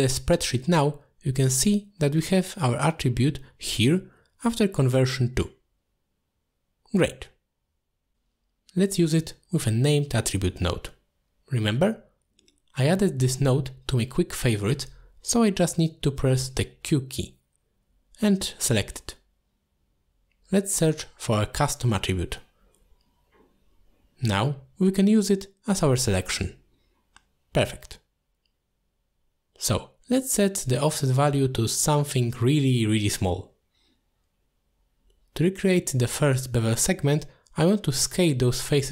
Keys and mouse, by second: 1.4 click, 2.8 middle click, 3.3 alt+shift+click, 4.7 click, 6.7 click, 9.7-10.8 drag, 11.5 middle click, 12.9-13.2 middle drag, 13.7 click, 14.3 middle drag, 14.6 q, 17.6 click, 18.8 click, 20.3 middle click, 21.5 click, 23.3 click, 23.5-25.3 drag, 26.0 click, 27.0-28.0 shift+drag, 28.9 ctrl+z, 29.6 click, 30.2 m, 30.5 m, 30.8 m, 31.1 m, 33.3-35.5 drag, 36.0 click, 36.8 middle click, 38.6 drag.